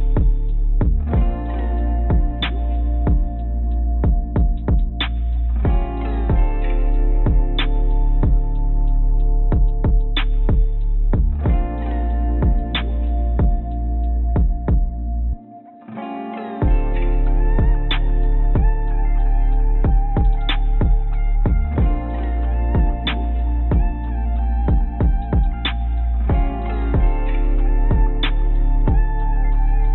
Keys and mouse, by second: 0.2 a, 1.1 ctrl+b, 8.9 click, 9.5 Tab, 10.3 click, 10.4-11.6 drag, 12.7 click, 14.9 click, 16.7 click, 17.2 click, 19.3 click, 20.1-21.3 drag, 21.9 click, 23.2 click, 23.3 click, 23.5 click, 24.1-25.5 drag, 25.7 click, 26.9 click, 27.8 ctrl+z, 27.9 ctrl+z, 28.0 ctrl+z, 28.2 ctrl+z, 28.3 ctrl+z, 28.4 ctrl+z, 28.4 ctrl+a, 28.5-29.4 ctrl+z, 29.5 ctrl+z, 29.8 ctrl+z.